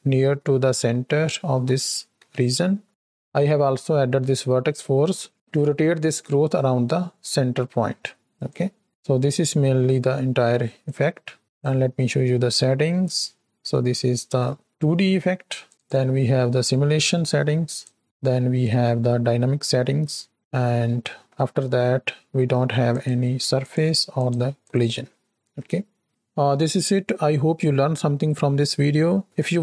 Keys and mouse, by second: 1.4 z, 2.2 z, 2.9 x, 8.5-11.3 drag, 11.4 click, 12.4 middle click, 15.6 drag, 17.7-21.1 drag, 21.1 middle click, 22.9 click, 23.5 click, 24.1 click, 24.6 click, 25.7 middle click.